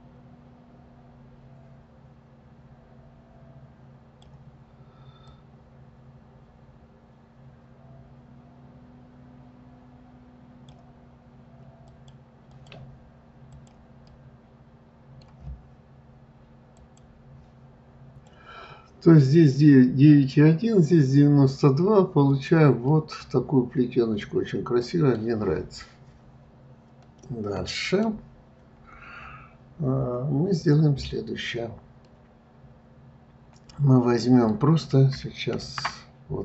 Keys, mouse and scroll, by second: 5.3-8.3 drag, 11.9 click, 13.5 click, 14.1-17.1 middle drag, 22.6 click, 23.2-25.7 middle drag, 25.7 scroll down 2, 27.4-30.4 middle drag, 32.4-35.4 middle drag.